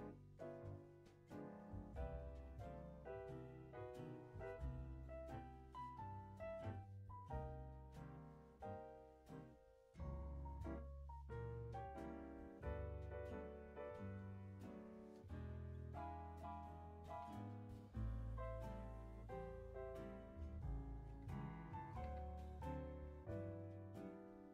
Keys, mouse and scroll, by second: 1.4 click, 2.0-2.3 scroll down 3, 2.5 middle click, 3.6-5.4 middle drag, 5.4-6.0 scroll up 10, 6.0 middle click, 7.3 click, 8.8 click, 10.0 click, 11.0-11.5 drag, 11.5 space, 12.2 space, 12.5-13.1 drag, 13.1 space, 14.0 space, 14.7-15.8 drag, 15.8 Delete, 16.1 click, 16.3 Delete, 16.7-19.8 drag, 21.9 g.